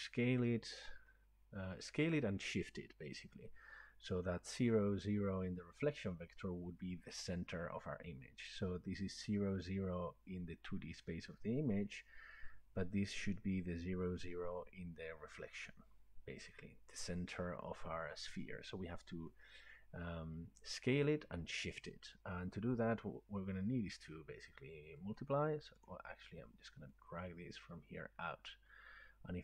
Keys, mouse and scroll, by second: 25.3 right click, 25.9 click.